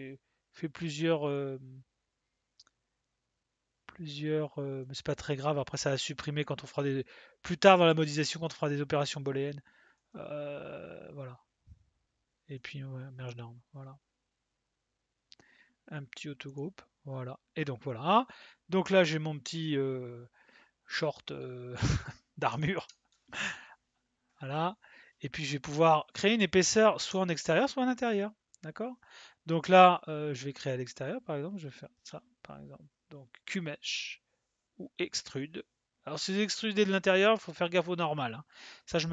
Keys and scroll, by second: 32.0 space.